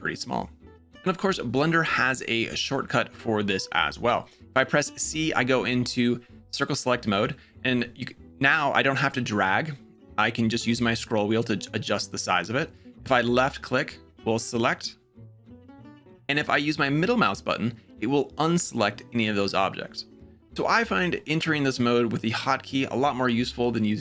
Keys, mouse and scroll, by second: 4.8 c, 16.6-20.9 middle drag.